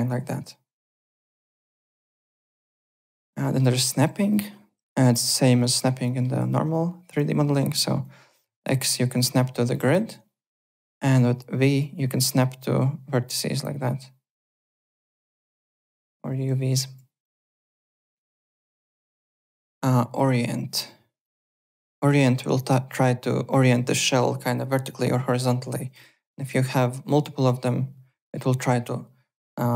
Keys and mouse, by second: 1.1 alt+Tab, 3.1 alt+Tab, 3.4 alt+middle click, 3.7 alt+right click, 5.2 click, 6.0 alt+middle click, 7.6 x, 8.0 click, 9.8 x, 9.9 ctrl+z, 11.0 v, 11.7 click, 11.7 v, 16.1 v, 16.9 alt+Tab, 17.2 alt+click, 18.9 alt+Tab, 18.9-19.8 typing, 19.4 click, 21.2 click, 25.9 click, 26.7 alt+right click, 27.0 alt+click.